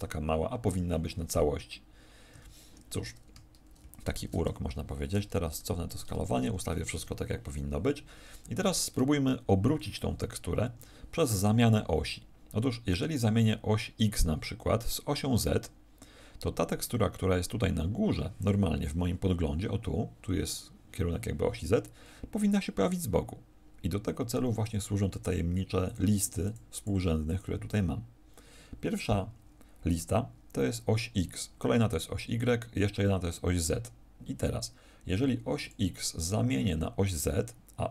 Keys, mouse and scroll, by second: 2.3 Escape, 4.0 alt+shift+t, 5.9 ctrl+click, 10.6 Escape, 11.4 middle click.